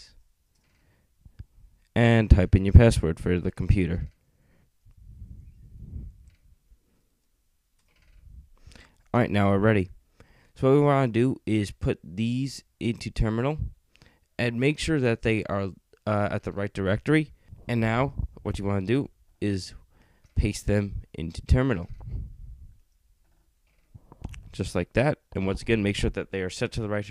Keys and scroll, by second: 0.0-0.2 typing.